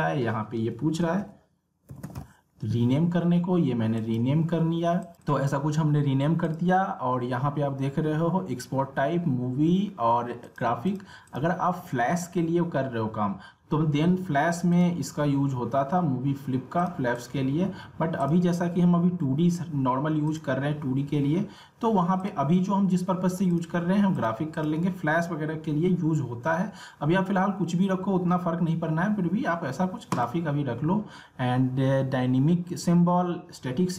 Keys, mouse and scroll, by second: 1.2-2.6 typing, 4.0 click, 10.4 click, 14.7 click, 30.1 click.